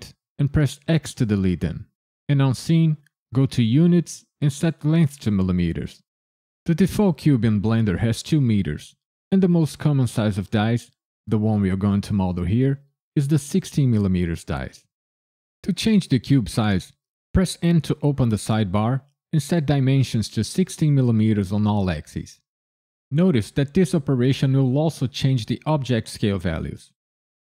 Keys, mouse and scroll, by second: 0.8 x, 3.6 click, 4.5 click, 7.2 click, 17.6 n, 19.2 click.